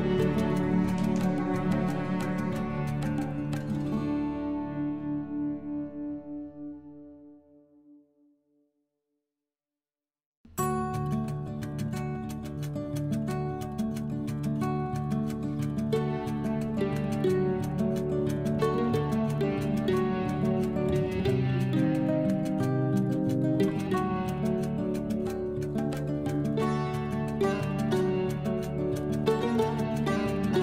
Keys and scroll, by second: 15.8 F12, 17.2 5, 17.5 Return, 18.6 F12, 19.2 3, 20.1 Return, 30.4 ctrl+z.